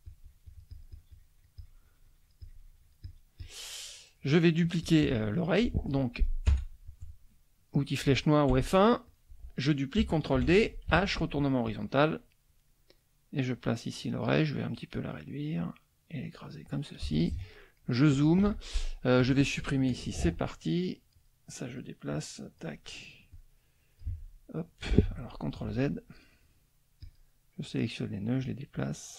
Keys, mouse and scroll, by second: 4.6 shift+click, 5.1 shift+middle click, 7.7 click, 8.5 F1, 9.1 click, 10.3 ctrl+d, 10.9 ctrl+h, 11.6-14.0 drag, 14.7-16.7 drag, 17.0 z, 17.1 click, 17.6 middle click, 18.4 F2, 19.2 click, 20.2 Delete, 21.1 click, 21.6 click, 22.1 click, 23.3 click, 24.0 Delete, 25.7 ctrl+z, 27.0 click, 27.6-28.6 drag, 28.8 click.